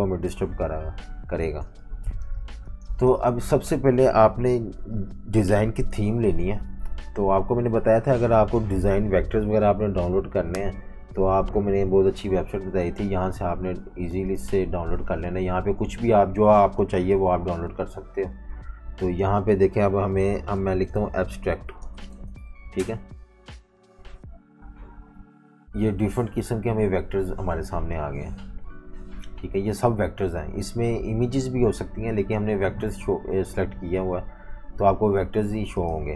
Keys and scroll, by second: 1.5-3.2 typing, 4.5 super+-, 6.7 F18, 17.7 F19, 20.1-22.5 typing.